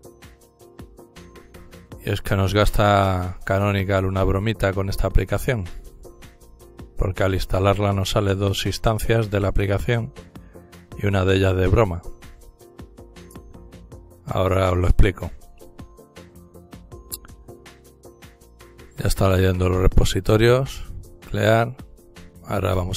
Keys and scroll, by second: 0.0-1.7 typing, 3.9 typing, 20.1-21.2 typing.